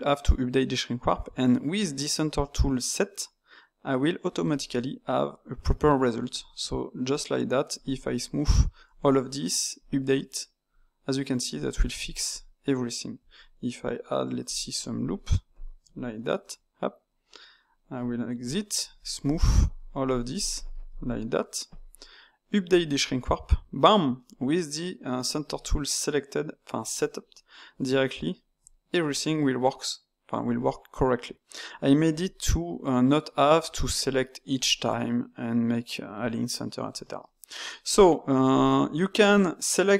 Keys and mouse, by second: 4.4-7.4 drag, 7.8-10.7 shift+drag, 10.7 middle click, 11.7-12.7 shift+drag, 12.7 middle click, 13.1 Tab, 14.8 ctrl+r, 18.3 Tab, 18.9-24.1 shift+drag, 24.1-27.1 middle drag, 28.2 Tab, 28.9-31.9 middle drag, 33.7 click, 34.5 ctrl+shift+click, 37.2-38.5 middle drag, 38.5 click.